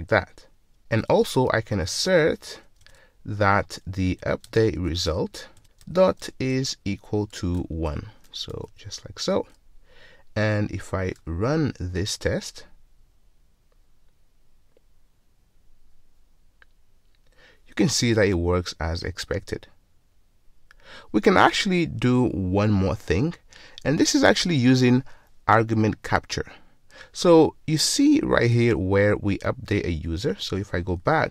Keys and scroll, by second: 2.9 Return, 31.1 ctrl+shift+super+t.